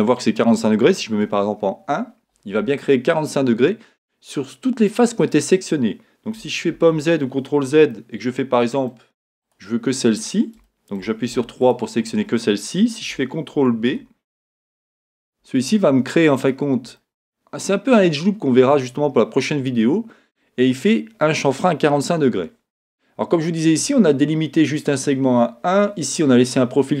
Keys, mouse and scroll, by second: 1.2 KP_1, 6.7 z, 7.9-9.4 middle drag, 9.4 click, 10.7 shift+middle click, 11.3 3, 11.6 click, 13.8 ctrl+b, 16.5 click, 17.0-27.0 middle drag, 19.8-21.6 scroll up 2.